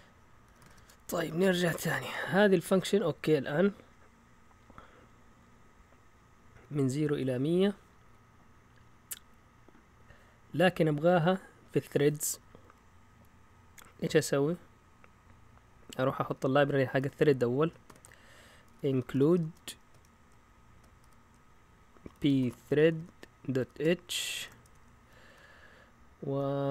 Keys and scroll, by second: 0.2-2.0 typing, 2.0 Return, 3.4 Down, 3.9-4.8 typing, 6.5 Down, 13.0 Up, 13.6 typing, 13.7-14.0 Up, 15.8 Up, 15.9 Up, 17.6-19.8 typing, 21.0-25.2 typing, 25.3-26.3 Down.